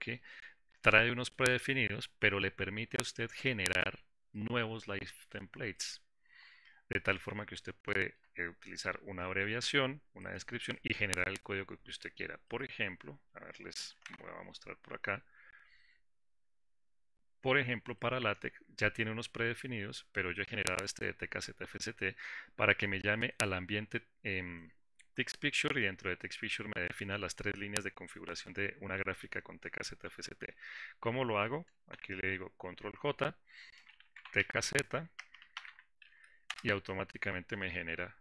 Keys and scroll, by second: 14.6 ctrl+alt+s, 15.4 ctrl+alt+s, 32.7 ctrl+j, 36.7 ctrl+j, 36.9 Return.